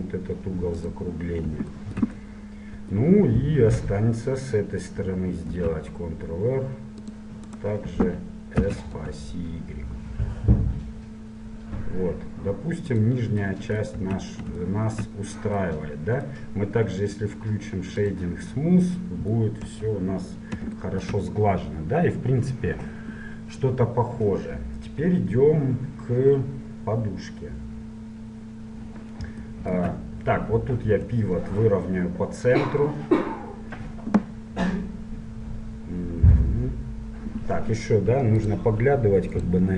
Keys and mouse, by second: 5.5 ctrl+r, 8.6 s, 14.1 Tab, 18.1 click, 18.6-19.7 middle drag, 19.7 click, 19.7 KP_1, 28.6-37.3 drag.